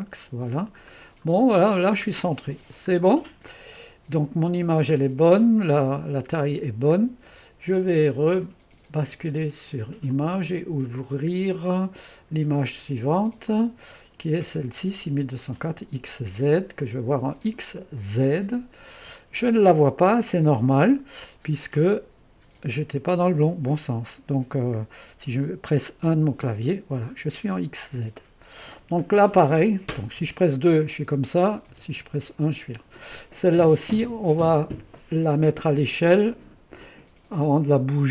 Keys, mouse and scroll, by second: 0.8 scroll down 2, 2.9-3.5 scroll down 2, 8.3-9.4 drag, 10.1-13.2 drag, 15.5 click, 15.8-16.8 drag, 17.0 click, 18.0-20.9 drag, 21.6-25.2 drag, 26.0 1, 27.2-27.7 scroll up 1, 27.7-28.2 scroll up 1, 28.2-30.2 drag, 30.2 2, 31.7-32.3 typing, 34.5-35.2 scroll up 1, 35.2-38.1 scroll down 1.